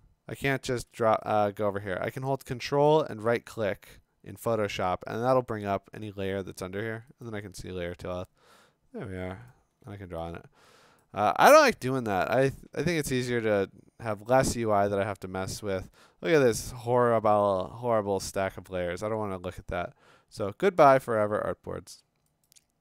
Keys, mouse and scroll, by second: 0.5 click, 0.5 right click, 1.3 click, 2.9 ctrl+right click, 7.2 ctrl+click, 9.5 click, 9.7 d, 11.0 click, 15.9-18.5 scroll, 21.0 click, 21.9 click, 22.5 click.